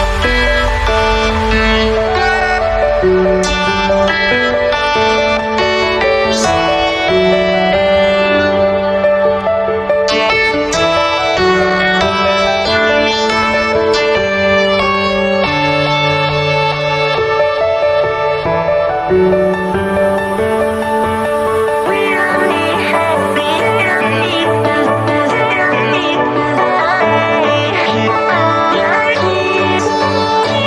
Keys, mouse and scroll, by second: 16.4-21.8 drag, 24.0 ctrl+e, 25.6 ctrl+click, 28.3 ctrl+e, 30.2 right click.